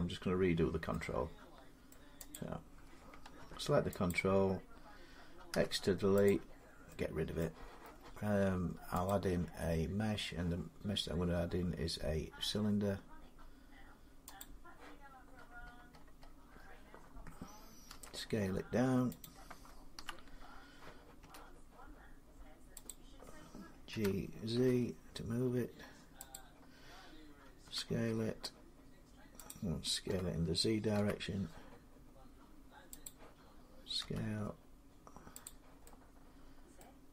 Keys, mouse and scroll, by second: 1.7 middle click, 2.1 click, 3.2 Tab, 3.9 click, 5.3 x, 6.1 click, 7.2 middle click, 8.9 click, 14.2 click, 14.9-17.7 scroll, 17.7 scroll, 17.7 s, 17.9 middle click, 19.0 click, 19.8 ., 21.0 s, 22.7 click, 23.7-24.4 typing, 26.1 click, 26.3 z, 27.4 s, 29.3 click, 29.9-30.7 typing, 32.9 click, 33.8 s, 35.3 click, 36.6 middle click.